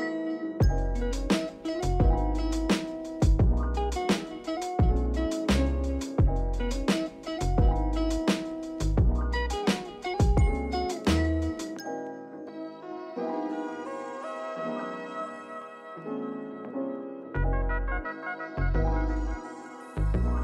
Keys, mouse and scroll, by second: 1.4 scroll down 2, 1.7-2.9 shift+middle drag, 2.9 click, 4.0-7.0 drag, 7.2 click, 7.6-8.1 shift+middle drag, 8.1 scroll up 1, 12.6 click, 18.0 click.